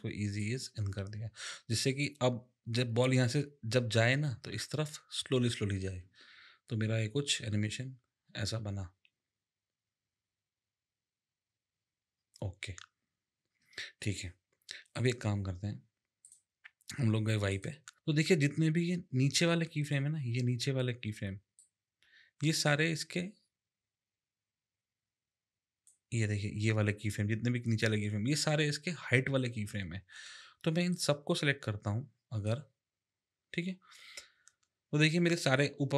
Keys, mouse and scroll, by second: 0.4 click, 6.0 space, 13.6 space, 14.9 click, 16.2 click, 17.5 click, 17.9 click, 21.6 click, 30.9 click.